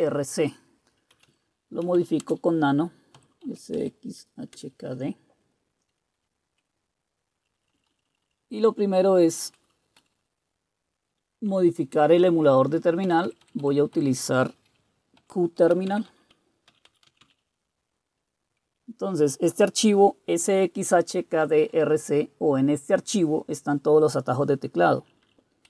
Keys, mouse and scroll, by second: 0.9-3.4 typing, 3.7 Tab, 4.5 Return, 7.4 Page_Down, 7.6 Down, 7.6 Down, 7.8 Down, 7.9 Down, 8.1 Down, 8.2 Down, 9.3 Right, 9.5 Right, 10.0 Left, 13.0 Delete, 13.3 Delete, 13.4 Delete, 13.6 Delete, 14.0 Delete, 14.9-17.7 typing, 25.0 Down, 25.2 Down.